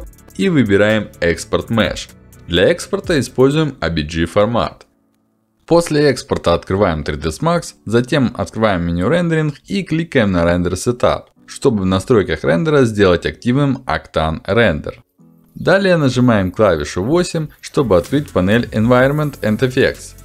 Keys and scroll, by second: 15.2 8.